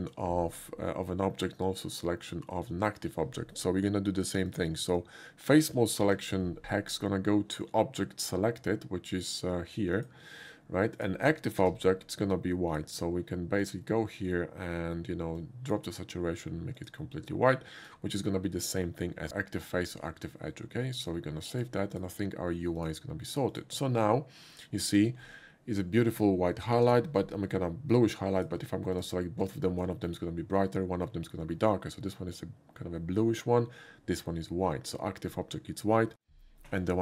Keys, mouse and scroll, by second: 4.5 click, 5.0 click, 6.1 ctrl+c, 10.0 click, 11.0 click, 11.6 ctrl+v, 12.7 click, 13.6 click, 15.4 click, 16.8 click, 17.5 click, 21.6 click, 22.0 click, 22.8 click, 23.5 click, 26.9 shift+d, 28.4 click, 29.0 shift+click, 30.0 shift+middle click.